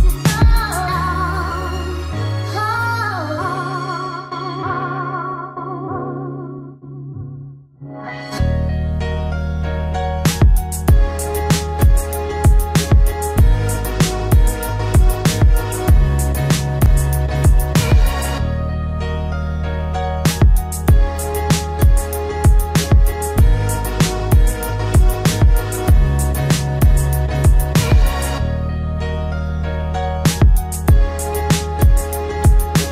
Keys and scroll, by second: 15.6 ctrl+g.